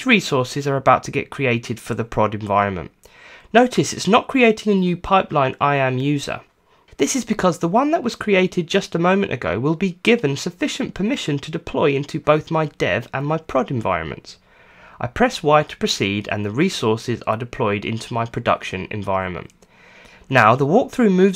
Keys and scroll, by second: 0.1 Return, 19.3 y, 20.1 Return.